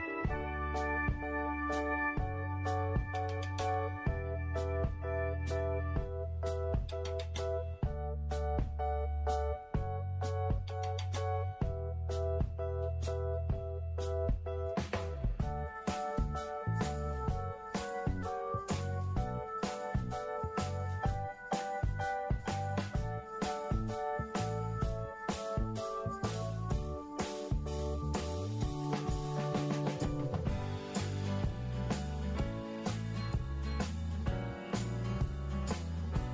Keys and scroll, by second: 24.2 Delete, 26.8 ctrl+g, 34.6 Delete.